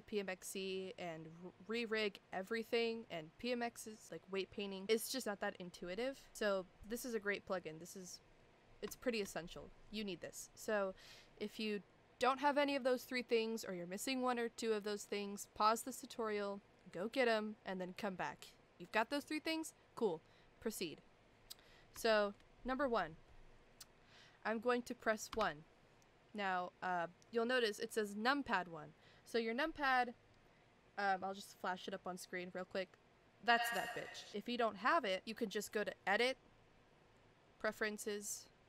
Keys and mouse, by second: 6.9-8.2 middle drag, 8.9 shift+middle drag, 22.2 shift+middle click, 25.3 KP_1, 36.2-37.8 drag.